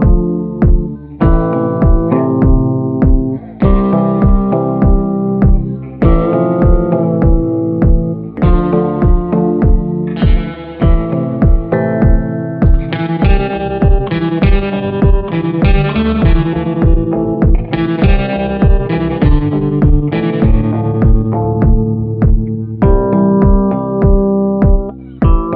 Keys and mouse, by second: 0.2 shift+b, 11.3 ], 11.5-14.5 drag, 17.1 click, 17.5 click, 20.4 click, 20.4 b, 20.9 ctrl+z, 21.3 click, 21.7 ctrl+z, 21.9 click, 22.7 ctrl+z, 22.9 click, 24.2 b.